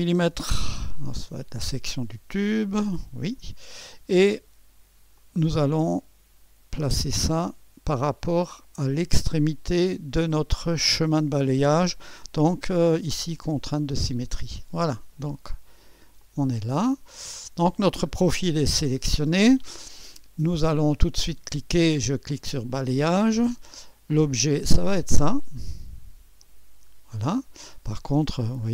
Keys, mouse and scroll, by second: 0.6 typing, 1.2 Return, 2.4-3.2 scroll down 1, 2.4 typing, 3.2-5.2 scroll down 1, 5.2 right click, 6.1 click, 7.0 right click, 7.7 click, 9.1-10.1 right drag, 13.8 click, 16.2-17.3 drag, 17.4-18.4 scroll down 2, 18.4-19.4 right drag, 22.2 click, 24.2-25.3 drag, 26.4-27.5 drag.